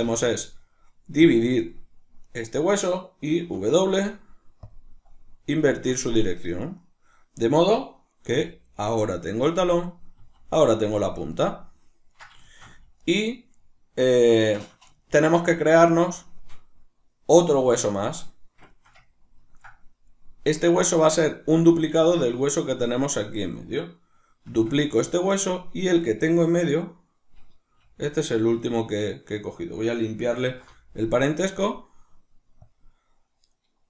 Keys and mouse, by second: 0.0 w, 2.3 right click, 3.4 w, 6.7 right click, 7.5 right click, 8.3 r, 9.8 right click, 10.2 r, 11.2 right click, 11.4-13.0 ctrl+middle drag, 13.0 right click, 14.4-22.6 shift+middle drag, 22.0 Tab, 22.6 right click, 24.5 shift+d, 25.2 right click, 25.8 right click, 26.0 right click, 27.8 g, 28.8 right click, 30.4 alt+p.